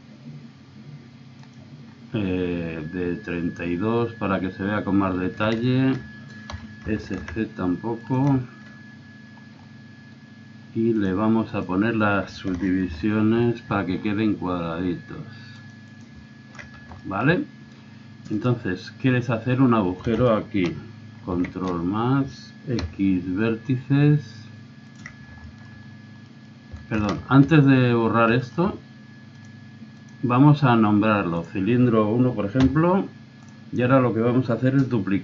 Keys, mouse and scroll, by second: 1.8 middle click, 3.3-5.7 middle drag, 5.7 click, 6.1-7.4 middle drag, 6.5 s, 9.5-10.7 middle drag, 11.0 click, 11.2 click, 11.8 click, 12.9 ctrl+r, 16.5 middle click, 16.6 click, 16.7 middle click, 17.0-18.4 drag, 18.4-20.1 right drag, 21.3 ctrl+KP_Add, 22.8 x, 26.3 middle click, 27.2 ctrl+z, 29.4 click.